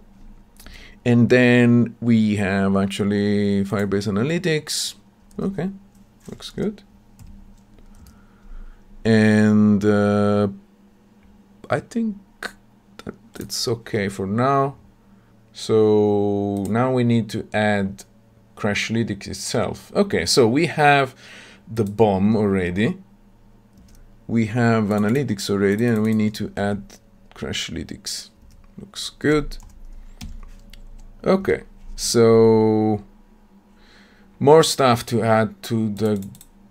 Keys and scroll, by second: 7.1 ctrl+v, 30.2 ctrl+v.